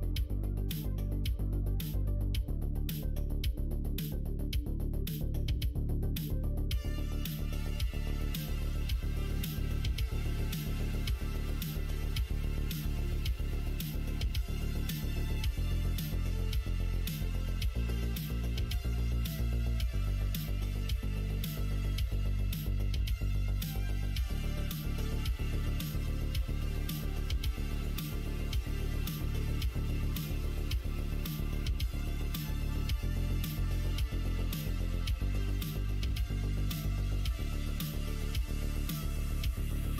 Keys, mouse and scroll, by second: 0.7 middle click, 1.6 middle click, 2.7-4.0 middle drag, 6.9 click, 7.7 middle click, 8.3 middle click, 8.9 click, 9.2 middle click, 9.6 shift+middle click, 10.3 middle click, 11.0 click, 12.0 Tab, 12.3 middle click, 13.3 ctrl+r, 16.6 click, 18.3 3, 19.1 alt+click, 19.4 middle click, 19.8 middle click, 21.0-22.7 middle drag, 23.4 alt+e, 27.0 2, 27.8 alt+click, 28.4 alt+shift+click, 29.4 alt+shift+click, 29.9 q, 31.4 middle click, 31.8 click, 32.0 Tab, 32.8 Tab, 33.2 middle click, 33.5 click, 33.8 middle click, 34.4 middle click, 35.0 middle click, 35.7-37.3 middle drag, 38.7 3, 38.8 click, 39.9 middle click.